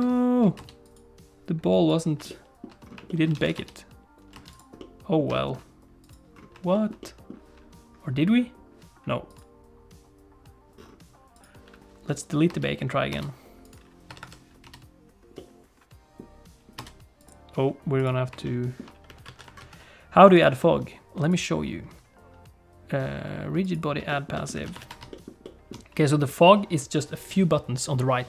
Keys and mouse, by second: 0.0 ctrl+alt+shift+space, 0.6 ctrl+space, 0.9 alt+shift+click, 2.0 alt+shift+click, 2.2 alt+shift+middle click, 2.4 shift+click, 2.4 shift+middle click, 3.0 shift+middle click, 3.3 alt+a, 3.5 space, 4.3 space, 4.5 click, 4.8 middle click, 5.3 shift+middle click, 6.1 click, 6.7 shift+middle click, 7.0 middle click, 11.4 click, 12.3 click, 12.5 space, 13.1 space, 13.7 click, 14.1 Tab, 14.2 Tab, 14.6 space, 15.5-16.6 middle drag, 16.8 space, 17.1 click, 18.0 click, 18.4 shift+middle click, 19.2 alt+a, 19.6 ctrl+s, 20.3 click, 21.2-23.8 drag, 24.1 shift+middle click, 24.3 middle click, 24.5 alt+a, 24.8 ctrl+s, 25.1 shift+middle click, 25.4 shift+click.